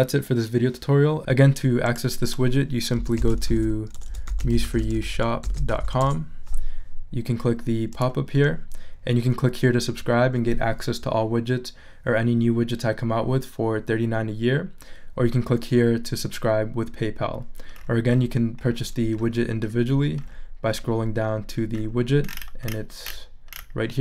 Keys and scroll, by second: 2.7-6.3 typing.